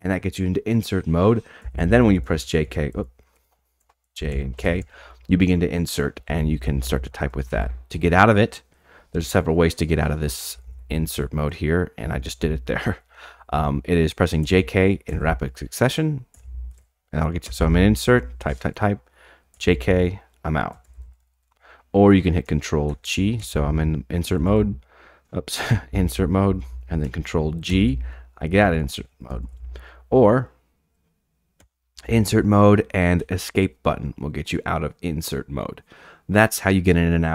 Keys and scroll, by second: 1.7-8.0 typing, 10.3-22.0 typing, 24.2 ctrl+g, 25.9-29.7 typing, 31.6 typing, 33.2 typing.